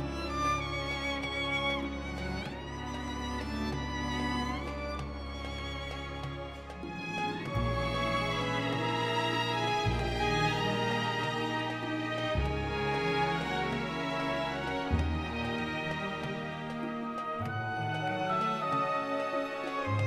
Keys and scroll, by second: 0.3 shift+z, 1.1 s, 1.2 z, 4.0 Tab, 8.1 Tab, 11.0 e, 14.7 i, 16.2 e, 19.3 ctrl+i.